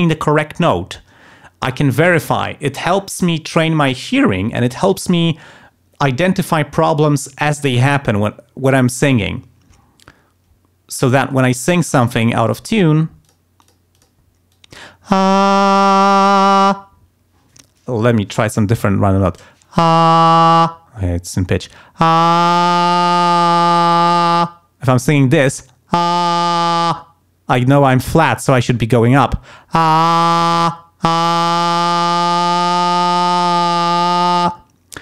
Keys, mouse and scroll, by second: 11.9 click, 13.2 click, 13.6 click, 13.9 click, 14.5 click.